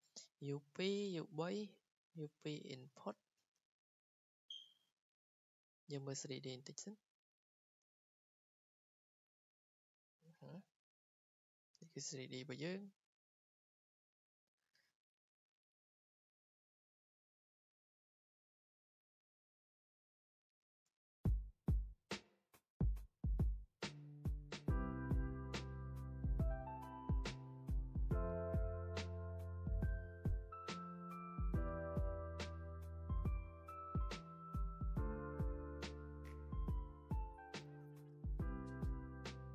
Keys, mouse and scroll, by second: 2.4 click, 5.4 click, 5.7 click, 7.2 click, 9.3 scroll, 11.2 click, 11.3-11.8 scroll, 12.4 click, 14.2 click, 15.5 click, 17.6-20.5 drag, 20.6 r, 20.9 r, 22.1 click, 24.2 click, 24.9 click, 25.0 click, 25.8 click, 26.3 click, 26.9 click, 27.0 click, 27.5 click, 28.1 click, 28.2 click, 28.8 click, 29.2 click, 29.2 click, 29.5 scroll, 29.9 typing, 30.8 click, 30.8 scroll, 31.3 click, 31.4 r, 31.5 click, 31.5 r, 31.7 r, 31.9 click, 32.2 middle click, 33.1-33.5 scroll down 4, 33.1 click, 33.3 click, 34.9 scroll down 3, 35.2 r, 35.9 r, 36.0 r, 36.5 click, 36.5 Escape, 36.6 middle click, 36.9 middle click, 37.8 r, 37.9 r, 37.9 scroll, 38.3 click, 38.5 click, 39.4 click.